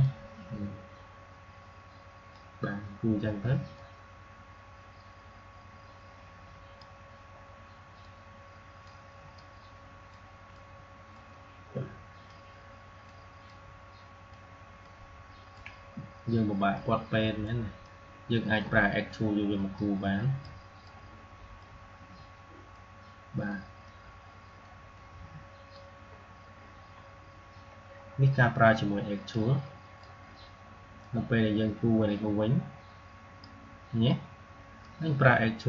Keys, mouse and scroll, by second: 7.9 typing, 12.1 typing, 24.8-27.8 drag, 27.8-29.0 scroll down 1, 29.2-35.6 drag.